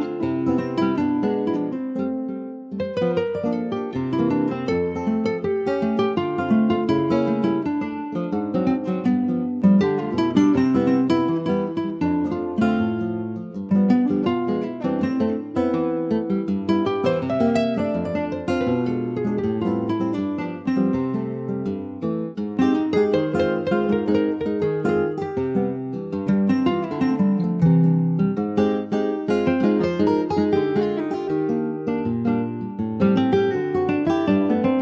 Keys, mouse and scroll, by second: 0.4-0.7 scroll up 4, 0.7 shift+middle click, 1.4 scroll up 1, 1.6 click, 1.7 Tab, 2.2 shift+middle click, 3.1 ctrl+r, 13.0 click, 15.5 middle click, 15.8-16.1 scroll up 1, 16.1 shift+middle click, 16.4-16.8 shift+scroll up 2, 16.8-19.8 middle drag, 19.8 e, 20.5 alt+s, 24.3 middle click, 25.1-26.0 shift+scroll up 4, 26.0 click, 27.2 w, 27.5 3, 27.8 click, 29.0 alt+shift+click, 29.5-30.7 middle drag, 30.7 click, 31.1 middle click, 32.0-33.7 drag, 33.7 Tab, 33.9 click, 34.1 scroll down 5, 34.4 middle click.